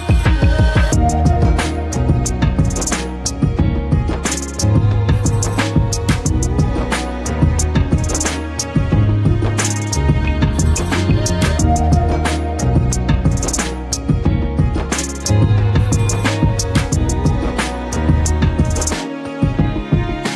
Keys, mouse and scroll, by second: 2.8 ctrl+=, 3.9 click, 5.6 click, 11.3 Delete, 12.9 ctrl+d, 15.0 click, 17.9 click.